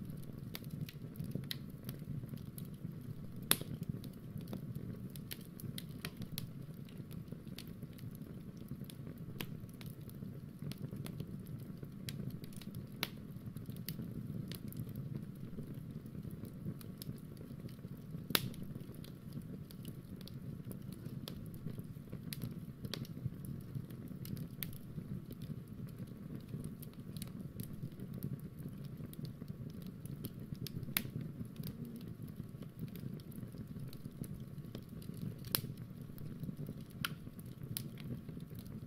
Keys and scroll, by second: 17.4 super+Tab, 18.5 super+Tab.